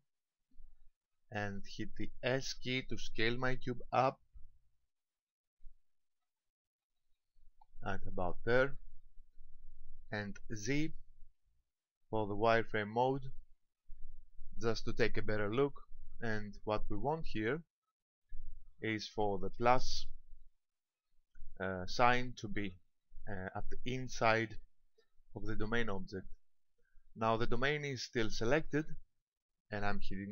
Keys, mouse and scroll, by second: 0.5 shift+middle click, 1.6-2.4 scroll up 2, 3.8 s, 8.3 click, 11.3 z, 16.1 middle click, 17.7 KP_7, 18.9 shift+middle click, 21.8 shift+middle click, 22.5-23.2 scroll up 3, 28.4-30.3 scroll down 4.